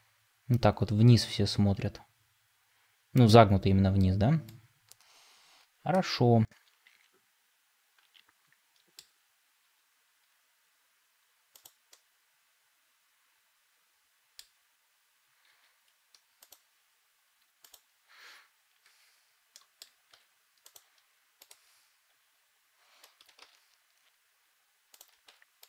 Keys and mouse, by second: 6.3-8.9 middle drag, 9.5 r, 11.8-14.3 middle drag, 15.4 g, 18.8 Tab, 19.4 middle click, 20.0 Tab, 23.3 shift+s.